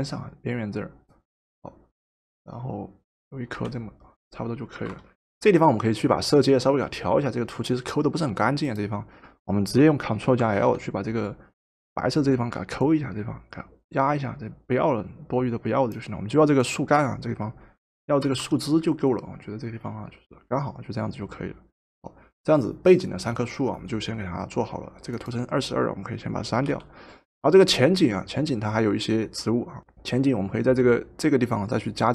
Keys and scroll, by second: 3.5 Return, 4.8 v, 10.2 ctrl+l, 18.3 v, 26.6 Delete.